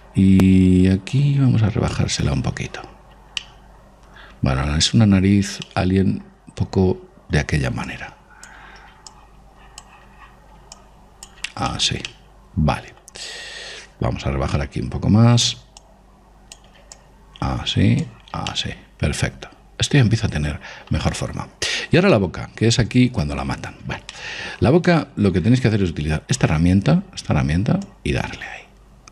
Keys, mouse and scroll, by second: 1.6 click, 3.8-5.8 middle drag, 6.1-11.1 middle drag, 8.3-13.0 drag, 12.1-14.4 middle drag, 16.3-19.3 drag, 19.0-20.8 middle drag, 22.0-27.0 middle drag, 28.3 click.